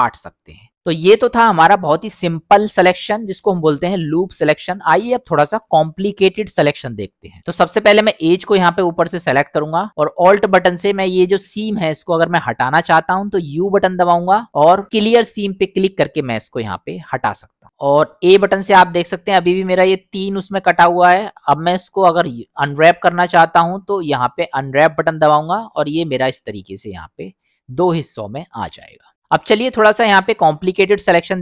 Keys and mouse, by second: 1.6 middle click, 8.1 click, 13.6 u, 18.3 a, 23.3 u, 28.2 middle click, 29.5-30.6 middle drag.